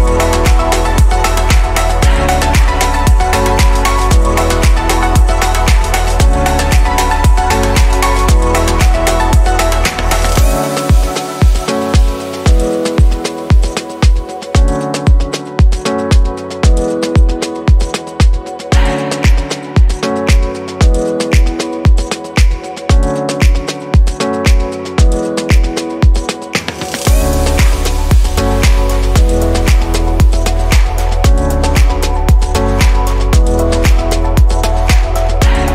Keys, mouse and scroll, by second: 0.8-8.4 drag, 8.4-9.2 scroll up 2, 9.2 click, 12.8-18.8 middle drag, 18.8 click, 19.0-19.9 middle drag, 21.3 ctrl+z, 22.8 click, 25.5 click, 29.2-31.7 middle drag, 31.7 click, 32.3 click, 34.3-35.7 drag.